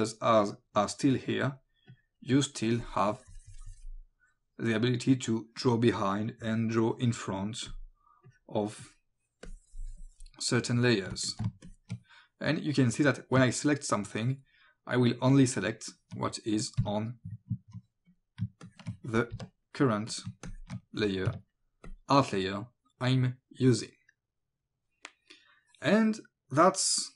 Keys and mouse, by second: 1.3 click, 6.7 click, 11.2 space, 11.3 click, 11.7 ctrl+click, 14.2 ctrl+click, 16.8 Delete, 18.1 click, 18.6 ctrl+click, 20.1 click, 20.5 ctrl+click, 21.9 click.